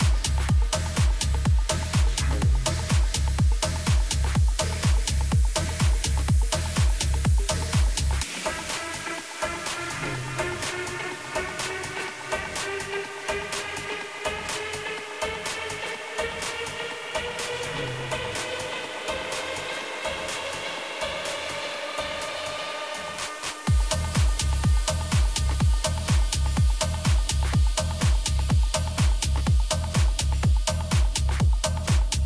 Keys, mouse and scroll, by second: 4.6-6.6 middle drag, 7.3 Tab, 9.5-11.4 drag, 10.5-12.2 right drag, 11.4 a, 12.0 a, 12.4 a, 12.7-14.6 right drag, 14.4 g, 16.9-19.2 middle drag, 20.7 a, 21.7 a, 22.2 a, 22.7 right click, 23.6 middle click, 24.2 right click, 24.3 middle click, 24.4 right click, 24.5-29.3 middle drag, 31.9 g.